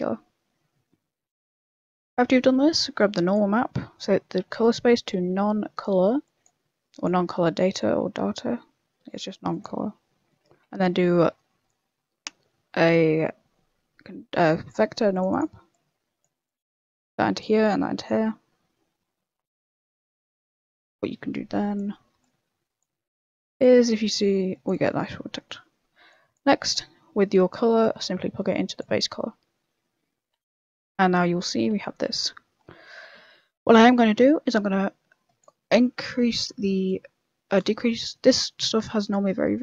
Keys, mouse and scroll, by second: 0.8 middle click, 1.8 middle click, 1.9-2.2 scroll down 7, 2.4 middle click, 2.9 click, 3.4 middle click, 3.7-4.1 scroll up 10, 4.6 click, 6.2 click, 7.0 click, 10.1 middle click, 10.6 shift+a, 15.7 click, 16.4 click, 19.8 click, 19.8 middle click, 20.5 click, 20.9 click, 22.8 click, 23.6 click, 24.9 middle click, 25.2 scroll down 5, 25.4 middle click, 26.1 click, 26.4 click, 26.8 middle click, 27.2 middle click, 27.8 click, 30.4 z, 31.1 middle click, 31.5 scroll up 4, 31.7 shift+middle click, 32.5 scroll down 5, 32.8 middle click, 33.2-33.5 scroll up 5, 33.5 middle click, 34.5 click, 36.3 middle click, 36.8 click, 37.7-38.2 scroll up 5, 37.7 middle click, 38.8 click.